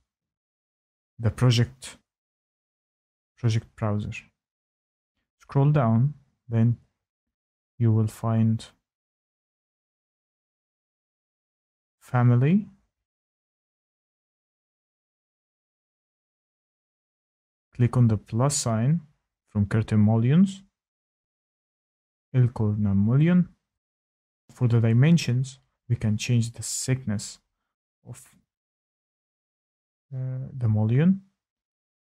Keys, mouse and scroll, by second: 2.4-3.3 scroll, 3.5-4.7 scroll, 7.0 click, 11.4 click, 12.4 click, 14.6 click, 21.9 click, 24.4 click, 24.4 middle click, 26.1 click, 26.3 click, 26.6-27.8 scroll, 27.8 middle click, 28.2 click, 30.2 click, 30.2 typing.